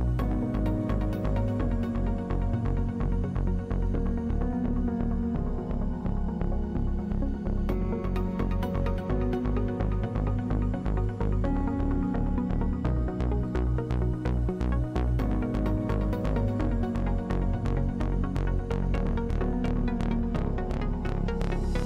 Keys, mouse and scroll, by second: 0.2 ctrl+Tab, 1.0 ctrl+Tab, 1.1 a, 2.6 ctrl+Tab, 2.8 a, 7.6-8.9 middle drag, 8.8 ctrl+w, 12.5-19.6 drag, 20.1 click, 20.4 click, 21.2 a.